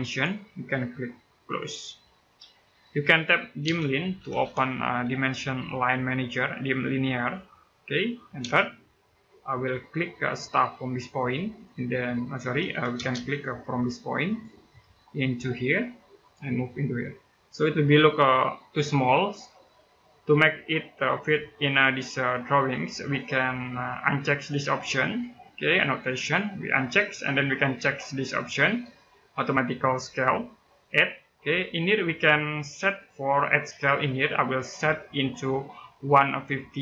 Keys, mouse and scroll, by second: 2.6 middle click, 3.2-4.7 typing, 7.0 click, 8.2 space, 9.8-10.8 scroll up 1, 11.3 click, 11.8 scroll down 1, 12.1 middle click, 12.4 Escape, 12.7 space, 13.0-14.0 scroll up 1, 14.0 click, 14.5 middle click, 16.0 click, 17.8-21.2 scroll up 1, 21.2 scroll down 1, 22.5 middle click, 26.7 click, 29.8 click, 33.9 click.